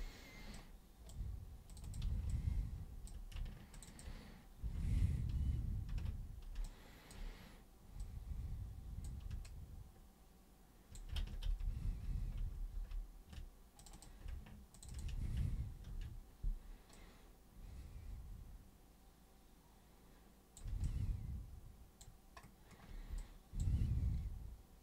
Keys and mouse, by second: 0.5 super+right click, 1.7 super+click, 1.8 super+click, 2.3-3.1 alt+super+drag, 3.7 ctrl+shift+super+click, 3.9 ctrl+shift+super+click, 5.9 ctrl+super+e, 6.6-7.1 alt+super+drag, 8.0-9.0 super+drag, 9.4-10.9 alt+super+drag, 11.4 ctrl+super+z, 11.8 ctrl+super+z, 12.3 ctrl+super+z, 12.7 ctrl+super+z, 13.7 super+click, 14.7 ctrl+shift+super+click, 14.9 ctrl+shift+super+click, 15.8 ctrl+super+c, 16.9-20.5 super+drag, 20.8-22.0 alt+super+drag, 23.2-23.5 alt+super+drag.